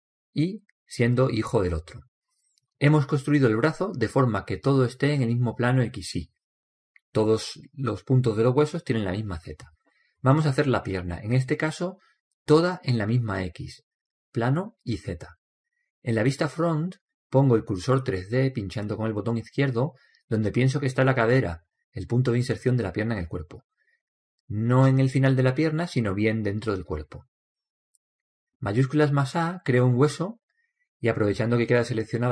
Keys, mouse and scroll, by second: 12.7-14.7 middle drag, 20.6-22.5 drag, 23.6-24.3 scroll down 1, 24.3-26.2 middle drag, 26.9-28.7 drag, 29.7 shift+a.